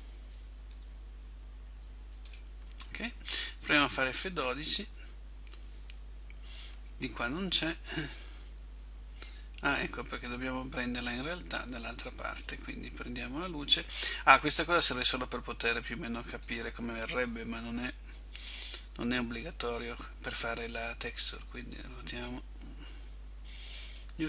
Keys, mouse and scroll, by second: 0.9 r, 6.8 Escape, 8.0 middle click, 10.0 middle click, 13.5 right click, 15.0 click, 17.5 middle click, 19.3 KP_1, 21.4 r.